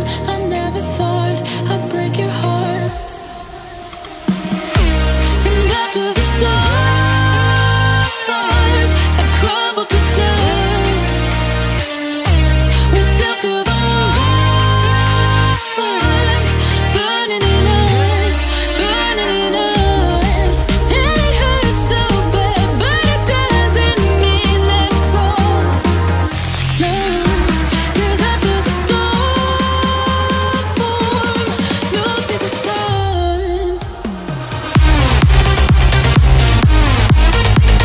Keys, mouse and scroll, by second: 0.6 click, 0.6 click, 1.2 scroll down 1, 2.7 click, 3.2 scroll up 1, 4.2-4.9 scroll down 1, 5.4-6.8 drag, 6.8 scroll down 1, 7.3 shift+middle click, 7.8-8.5 scroll up 1, 8.5 click, 11.5-11.9 scroll down 1, 12.4 click, 13.4 Delete, 13.4-14.1 scroll down 1, 14.3 click, 14.7 Delete, 14.9-15.3 scroll up 1, 15.3 click, 15.6 Delete, 16.0 click, 16.5 Delete, 17.1 click, 17.4 Delete, 17.8 click, 18.3 Delete, 18.8 scroll up 1, 19.6 e, 20.0 click, 21.2 scroll down 1, 21.7 shift+middle click, 22.3-22.7 scroll up 1, 23.1 click, 24.0 scroll down 1, 24.6 scroll down 1, 24.9 shift+middle click, 25.2 scroll up 1, 26.2 click, 27.2 scroll down 1, 27.9 shift+middle click, 28.3-28.7 scroll up 1, 29.1 click, 29.4 scroll down 1, 30.1 shift+middle click, 30.8-31.4 scroll up 1, 31.4 click, 31.7 space, 31.8-32.4 scroll down 1, 32.8 click, 33.3 ctrl+click, 34.5 scroll up 1, 34.9 ctrl+click.